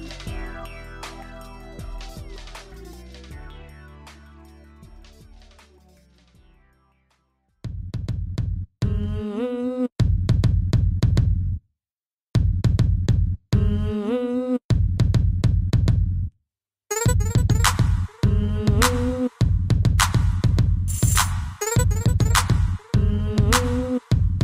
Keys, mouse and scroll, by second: 1.5 click, 1.7 click, 2.4 shift+click, 2.5 shift+click, 2.9 shift+click, 4.7 click, 7.1 click, 7.2 click, 7.2 click, 8.8 ctrl+z, 10.1 click, 13.8 a, 14.3 b, 14.8 click, 17.3 g, 18.5 click, 18.6 click, 20.2 click, 20.3 click, 21.1 Delete, 21.2 Return, 22.7 click.